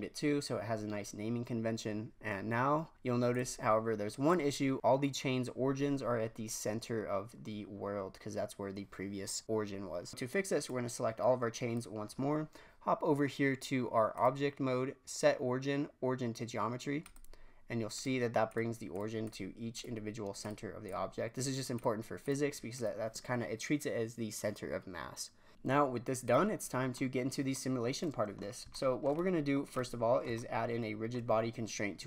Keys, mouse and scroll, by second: 0.4-1.3 scroll down 2, 1.3-3.3 scroll up 4, 3.3-4.3 drag, 10.6 click, 14.1-17.1 drag, 17.9 click, 18.4 click, 18.9-19.2 drag, 19.7-20.7 drag, 20.8-22.2 drag, 22.7 click, 25.5-26.0 scroll down 1, 26.2 click, 27.5 middle click, 27.6-28.4 scroll up 1, 28.4 scroll down 2, 28.7-29.5 shift+middle drag, 29.5 scroll up 1, 29.8-30.3 middle drag, 30.3 shift+scroll down 1, 30.4-32.0 shift+middle drag.